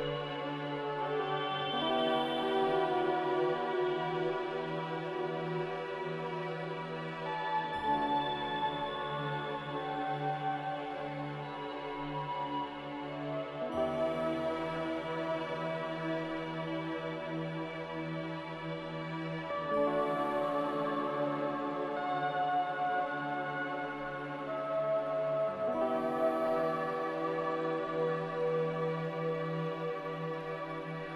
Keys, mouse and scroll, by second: 21.8 q, 25.2 z, 27.1-27.9 typing.